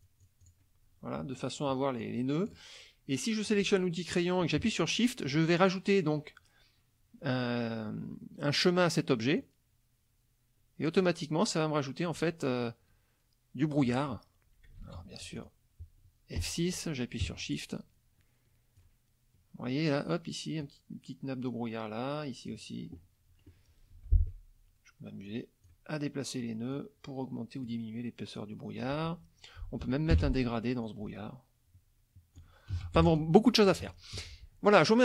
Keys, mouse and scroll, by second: 0.0-0.7 drag, 2.0 click, 3.5 click, 9.4-11.2 shift+drag, 12.2-14.0 shift+drag, 14.8 ctrl+z, 15.2 ctrl+F2, 15.4 ctrl+click, 16.4 F6, 17.6-19.0 shift+drag, 20.6-22.7 shift+drag, 24.0 F2, 25.3 click, 26.7 click, 28.4 click, 30.1 g, 30.8-32.6 ctrl+drag, 32.7 ctrl+z, 33.0 ctrl+F1, 33.1 ctrl+click, 33.7 KP_Subtract, 34.2 F1.